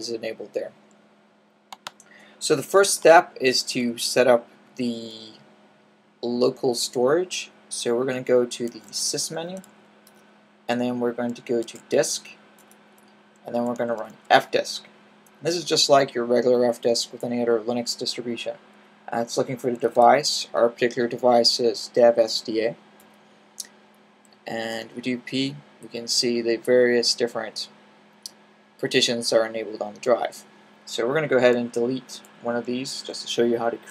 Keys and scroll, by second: 2.7-3.6 typing, 8.1-9.5 typing, 11.3-12.1 typing, 13.2-14.2 typing, 19.4-20.1 typing, 24.1 p, 31.8 d, 32.9 4.